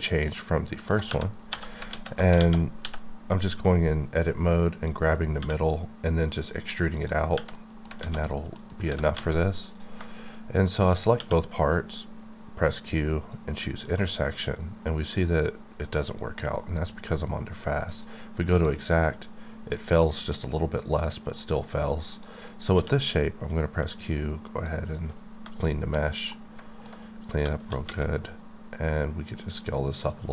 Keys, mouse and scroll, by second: 1.5 1, 1.9 alt+z, 2.4 alt+a, 2.8 b, 3.4 click, 5.4 e, 6.9 click, 7.2 scroll down 1, 7.8 alt+middle click, 8.0 alt+z, 8.3 middle click, 8.6 scroll up 2, 8.9 g, 9.1 z, 9.7 click, 9.9 shift+click, 11.1 q, 13.3 click, 16.6 F9, 17.9 click, 18.5 click, 20.0-21.7 middle drag, 21.7-22.1 scroll up 1, 22.1 click, 22.7 q, 24.7 click, 26.0 scroll down 1, 26.3 middle click, 27.0-27.6 scroll up 3, 27.6 s, 27.8 z, 30.0 click.